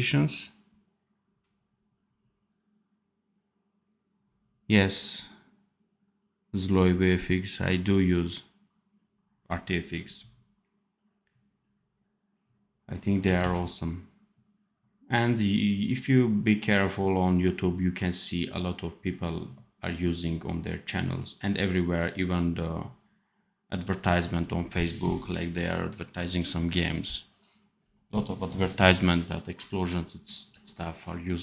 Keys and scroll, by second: 13.3 ctrl+z.